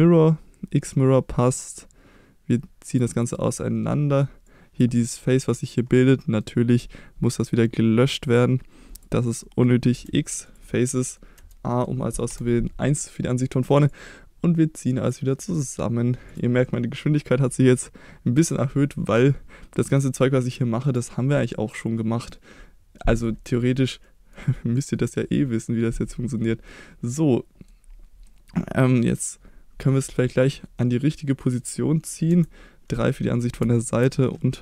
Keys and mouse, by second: 1.5-3.0 drag, 4.5 click, 4.9 middle click, 6.2 middle click, 8.3 click, 9.0 click, 9.4 middle click, 10.0 x, 10.9 middle click, 11.4 a, 11.7 middle click, 12.3 KP_1, 13.9-15.1 drag, 16.3 click, 17.4-21.0 drag, 23.0 middle click, 24.0 middle click, 26.7-27.7 middle drag, 28.3-29.3 middle drag, 30.8 middle click, 32.3 KP_3, 33.6 Tab.